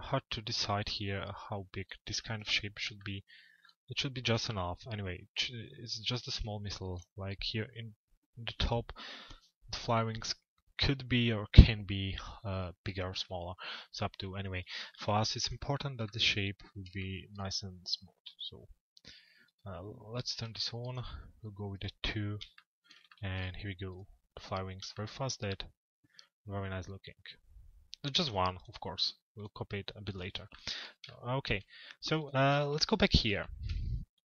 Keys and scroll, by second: 32.1 t.